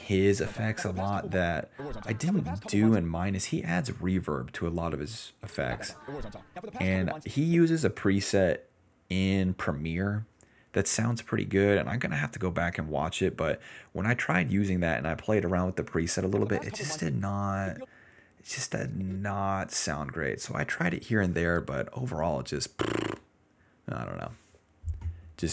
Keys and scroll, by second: 0.4 space, 1.3 space, 1.7 space, 2.9 space, 5.4 space, 5.7 s, 6.8 s, 7.1 space, 16.2-17.7 typing, 20.9 s, 21.7 ctrl+s, 22.4 s.